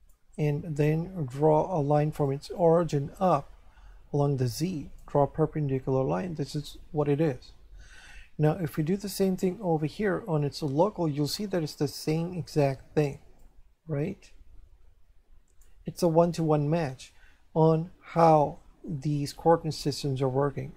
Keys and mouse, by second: 2.2 click, 9.9 click, 13.4 click.